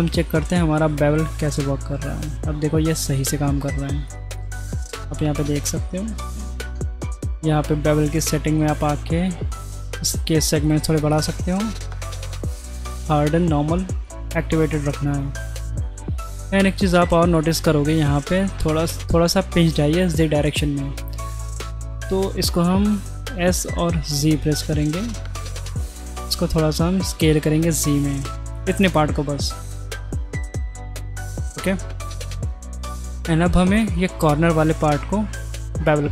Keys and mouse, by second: 0.4 ctrl+b, 4.4 middle click, 5.9 middle click, 8.3 shift+middle click, 10.5 click, 10.9 click, 14.2 middle click, 15.1 middle click, 16.0 click, 16.9-17.3 drag, 21.2 middle click, 22.0 shift+middle drag, 23.0 s, 26.6 middle click, 28.0 middle click, 29.5 middle click, 30.8 middle click, 31.6-32.3 middle drag, 32.5 middle click, 33.1 middle click, 33.9 click, 34.9 middle click, 35.4 middle click.